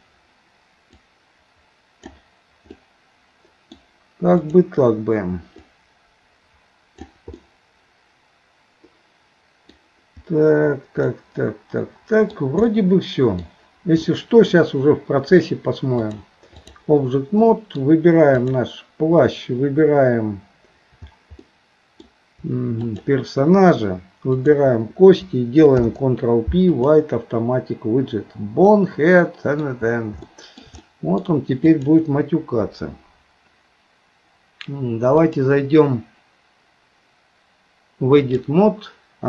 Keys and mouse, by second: 1.0-2.1 drag, 2.8-3.8 middle drag, 4.4 click, 5.8 click, 6.1 click, 7.4-9.8 middle drag, 11.1-12.4 middle drag, 12.7 middle click, 14.1 shift+middle click, 16.0 click, 17.5 middle click, 21.4 middle click, 22.8 shift+click, 24.3 shift+click, 25.8 ctrl+p, 28.7 middle click, 30.2 shift+middle click, 30.8 middle click, 31.7 click, 35.3-38.5 drag.